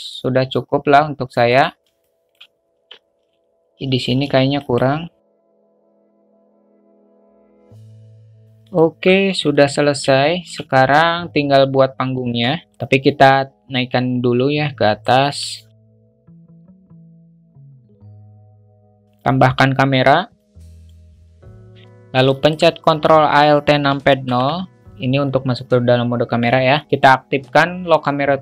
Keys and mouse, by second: 0.0 click, 2.0 alt+shift+middle drag, 2.7 Tab, 4.1 ctrl+r, 5.6 ctrl+r, 5.9 Tab, 6.1 Tab, 6.2 alt+middle click, 6.6 alt+shift+middle click, 7.0 alt+z, 7.0 a, 7.0 click, 7.4 shift+click, 7.6 click, 7.9 Tab, 8.0 alt+z, 8.0 alt+middle click, 8.1 alt+z, 8.2 middle click, 8.2 Tab, 8.7-9.0 alt+middle drag, 9.2 `, 10.2 shift+middle click, 12.6 alt+shift+middle drag, 12.7 ctrl+z, 13.1-15.0 drag, 15.4-17.3 typing, 16.6 middle click, 16.8 Tab, 17.0 alt+middle click, 17.8 ctrl+b, 18.2 Tab, 18.4 `, 19.1 shift+a, 22.3 alt+shift+middle click, 24.2 ctrl+alt+KP_0.